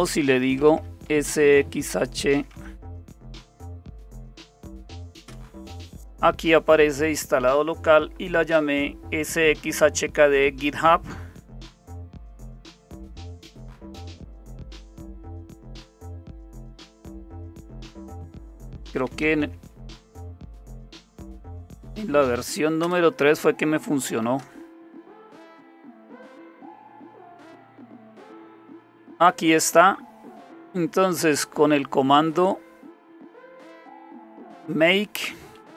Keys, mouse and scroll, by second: 0.0-4.6 typing, 5.3 Return, 11.9-17.2 typing, 17.4 Tab, 18.7-22.2 typing, 22.8 Return, 23.8-27.4 typing, 32.5-33.8 drag, 34.5 click.